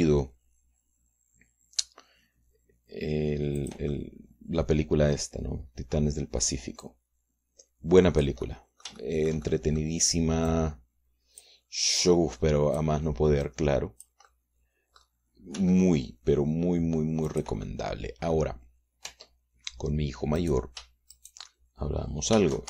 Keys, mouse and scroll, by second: 1.0 g, 4.7 click, 7.0 click, 7.9-9.5 drag, 10.0-11.0 shift+drag, 11.6-12.7 drag, 13.1-14.1 drag, 14.6 click, 16.6 g, 18.4 click, 18.8 click, 20.2 Tab, 21.5 click, 22.2 shift+click.